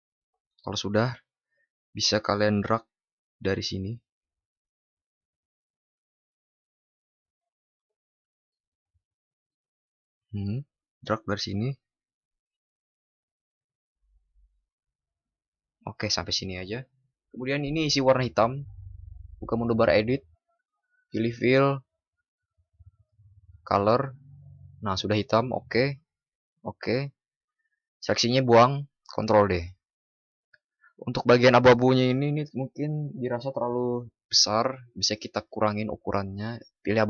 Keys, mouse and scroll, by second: 29.3 ctrl+d.